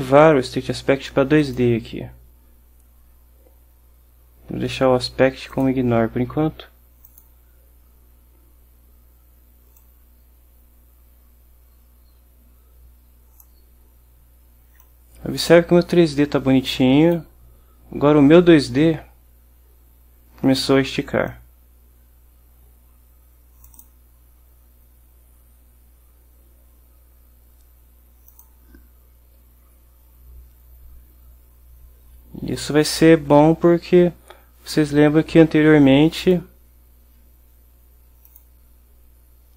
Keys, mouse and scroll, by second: 1.5 click, 5.6 click, 7.2 click, 9.9-13.7 drag, 14.9-17.4 drag, 21.4-24.1 drag, 28.4 click, 36.3 click, 38.4 click.